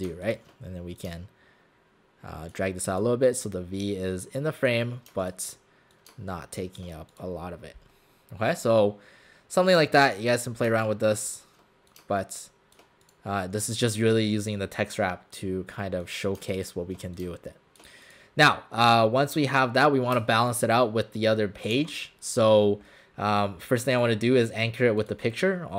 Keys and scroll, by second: 21.8 w.